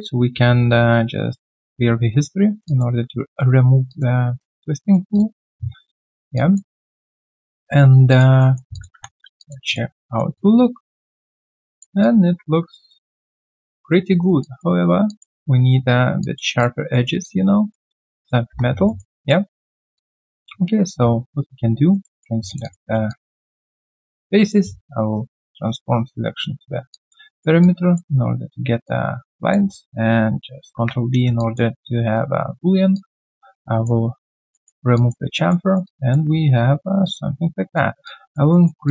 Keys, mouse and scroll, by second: 2.6 alt+click, 4.5 alt+click, 4.8 alt+right click, 5.9 alt+middle click, 6.3 alt+click, 6.8 alt+middle click, 7.7 alt+middle click, 8.1 alt+click, 8.4 alt+middle click, 9.3 3, 9.4 alt+click, 9.7 alt+click, 10.0 alt+middle click, 10.3 alt+click, 12.0 alt+click, 13.9 alt+middle click, 14.2 alt+right click, 14.4 alt+click, 15.1 alt+click, 16.2 alt+click, 16.9 alt+middle click, 17.2 alt+click, 17.9 alt+right click, 18.2 alt+click, 18.5 1, 18.8 alt+middle click, 19.2 alt+click, 19.6 alt+middle click, 19.9 alt+click, 21.4 right click, 22.5 shift+click, 22.6 shift+double click, 23.1 alt+click, 25.0 ctrl+right click, 26.9 alt+click, 27.3 alt+middle click, 27.6 alt+click, 28.8 alt+click, 30.7 ctrl+b, 31.4 alt+click, 33.6 alt+click, 34.5 alt+middle click, 34.9 alt+click, 35.3 alt+middle click, 35.6 alt+right click, 35.8 alt+click, 38.0 alt+click, 38.5 alt+middle click, 38.8 alt+click.